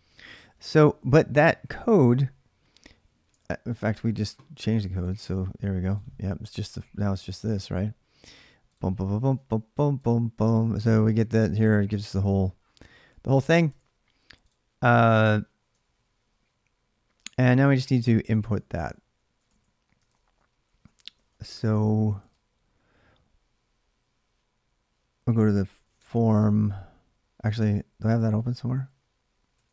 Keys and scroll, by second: 0.2 ctrl+c, 3.1 alt+Tab, 8.4-9.5 typing, 13.5 alt+Tab, 15.6 ctrl+a, 15.8 ctrl+a, 18.1 ctrl+[, 18.4 ctrl+a, 18.6 ctrl+a, 19.8 ctrl+[, 19.8 ctrl+a, 20.0 ctrl+j, 20.0-27.8 typing, 27.3 ctrl+[, 27.9 ctrl+a, 28.1 ctrl+a.